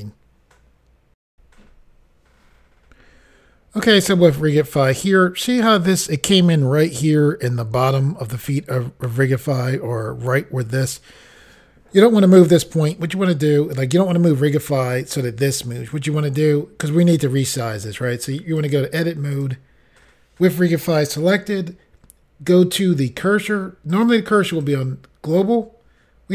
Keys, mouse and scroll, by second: 1.3 Insert, 18.6 click, 19.3 click, 23.9 click, 24.6 click.